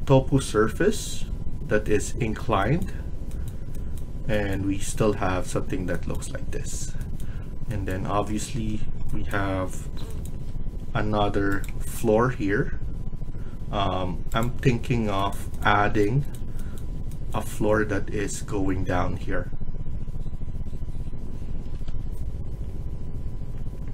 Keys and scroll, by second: 15.6 Escape.